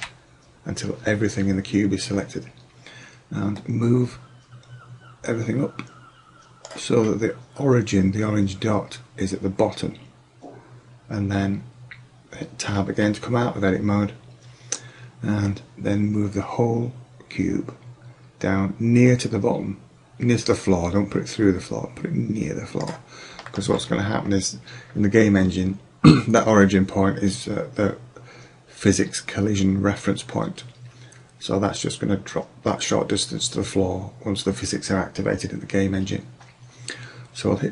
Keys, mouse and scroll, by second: 0.0 a, 3.6-5.5 drag, 7.0-7.4 middle drag, 9.9-12.5 middle drag, 12.7 Tab, 15.5 click, 23.6-26.3 middle drag.